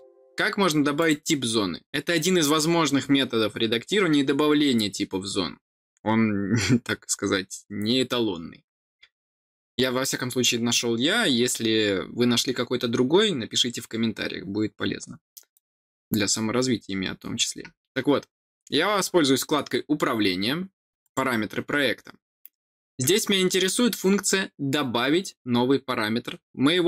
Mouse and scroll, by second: 0.9 click, 15.5 click, 21.0 click.